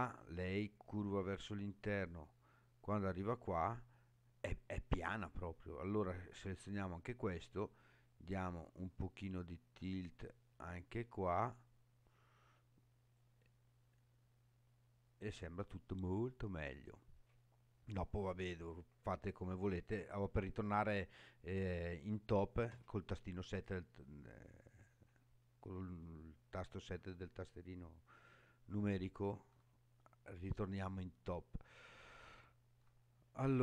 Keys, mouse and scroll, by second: 5.8 click, 8.1-13.2 drag, 13.6-14.8 middle drag, 15.8-16.8 middle drag, 17.2-17.8 scroll down 4, 22.7 KP_7, 26.2 shift+middle click, 27.4-28.6 scroll down 2, 28.7 shift+middle click, 29.8-30.2 scroll down 4, 30.9-31.6 scroll up 1, 31.8-32.8 shift+middle drag, 33.1-33.6 scroll up 4.